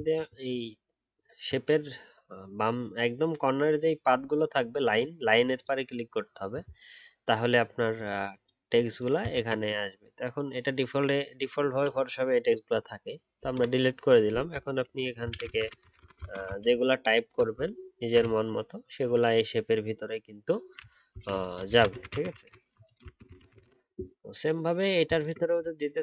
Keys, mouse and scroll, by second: 0.1 ctrl+click, 1.1 alt+scroll up 1, 6.2 alt+scroll down 1, 25.1 ctrl+click, 25.6 alt+scroll up 2.